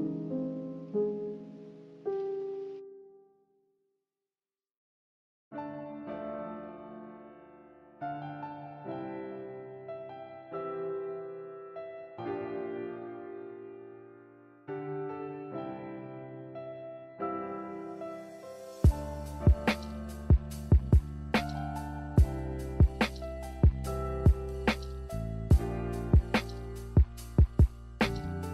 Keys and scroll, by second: 2.7 z, 5.3 ctrl+z, 5.6 ctrl+z, 6.2 a, 12.0 Delete, 12.4 Delete, 13.8 b, 14.8 Delete, 16.3 n, 22.8 b.